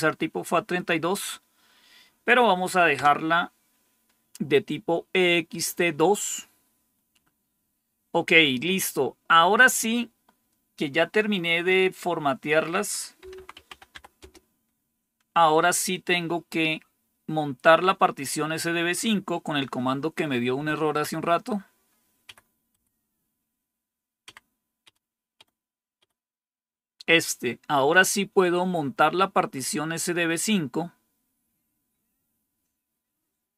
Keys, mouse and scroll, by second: 2.9 Return, 12.9-14.3 typing, 20.4 Up, 20.9 Up, 22.2 Up, 22.6 Up, 24.2 Up, 24.7 Up, 25.3 Up, 25.9 Up.